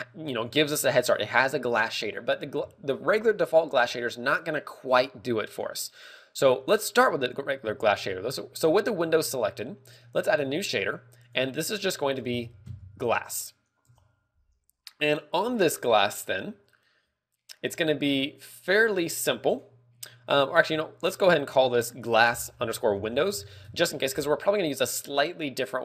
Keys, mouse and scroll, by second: 0.9 click, 6.2 right click, 7.6 z, 8.2 z, 10.8 click, 11.1 click, 21.6 click, 22.0 click.